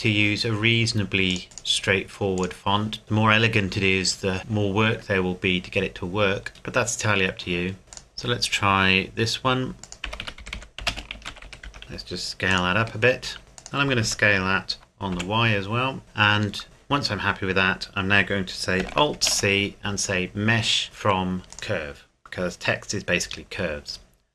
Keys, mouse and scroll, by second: 1.3 click, 3.0 scroll down 1, 5.6-6.0 scroll down 1, 7.9 click, 9.8 click, 10.0-12.8 typing, 12.5 click, 13.6 click, 14.0 s, 15.2 y, 16.0 Tab, 19.2 alt+c, 21.5 click.